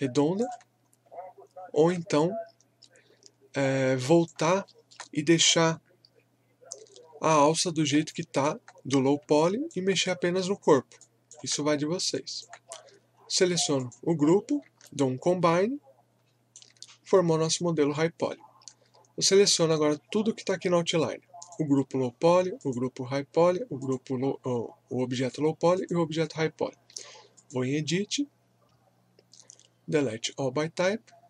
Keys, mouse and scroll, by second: 0.8 scroll down 1, 1.6 scroll up 1, 2.2-4.7 drag, 4.7 alt+middle click, 7.0 scroll down 1, 8.1 alt+click, 9.3 alt+click, 10.6 scroll up 1, 11.0 alt+click, 11.7 scroll down 1, 12.1 alt+click, 14.4 scroll up 1, 14.8-18.5 shift+right drag, 18.5-18.9 scroll down 1, 21.4 click.